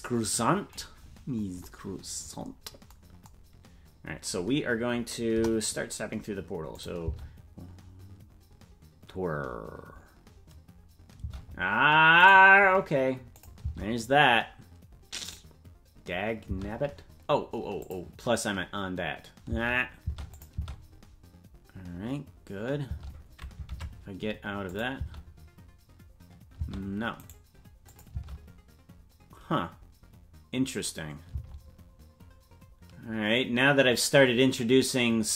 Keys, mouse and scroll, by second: 1.3 scroll up 2, 5.3 KP_0, 6.7 click, 7.0 space, 11.8 space, 12.3 right click, 13.3 click, 13.6 space, 17.2 space, 17.8 click, 19.4 space, 20.3 click, 20.5 space, 23.7 space, 23.7 ctrl+Tab, 24.6 click, 24.9 space, 27.1 space, 27.3 right click, 27.9 click, 28.1 space, 32.1 space.